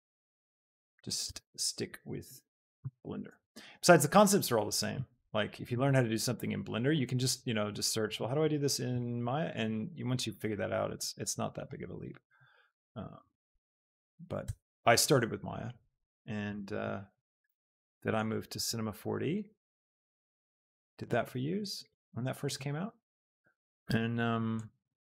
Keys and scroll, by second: 1.2 Tab, 2.6 a, 3.0 s, 3.4 z, 5.6 g, 5.9 z, 14.4 Tab, 16.9 Tab, 17.7 Tab, 18.8 s.